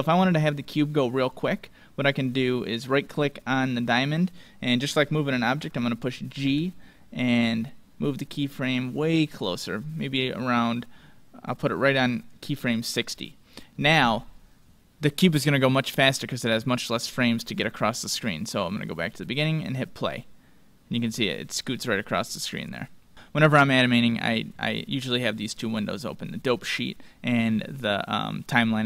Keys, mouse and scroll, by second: 1.1-3.1 right drag, 6.5 g, 18.7-21.8 drag, 23.2-24.7 drag.